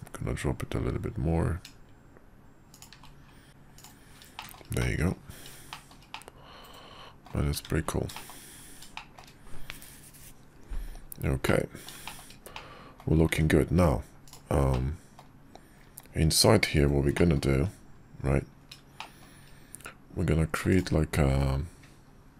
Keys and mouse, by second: 3.5 shift+2, 3.7 right click, 4.4-5.1 shift+middle drag, 5.7 shift+middle drag, 6.1-7.2 middle drag, 8.1 shift+middle drag, 8.9 shift+middle drag, 11.5-11.9 middle drag, 12.1 shift+middle click, 12.5-13.0 middle drag, 14.7-15.2 middle drag, 17.2 middle click, 19.0 shift+middle drag, 20.7 click.